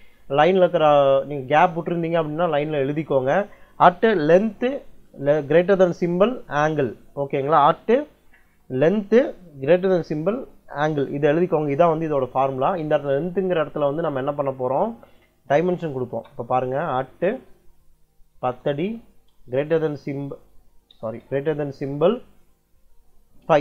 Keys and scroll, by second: 15.9 space, 17.3-19.2 typing, 20.7 BackSpace, 21.5 shift+,, 23.3 5.